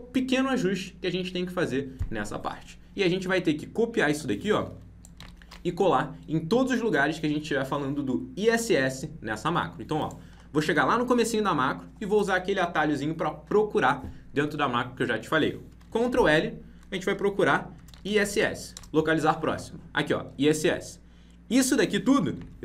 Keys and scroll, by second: 5.1 ctrl+c, 16.0 ctrl+l.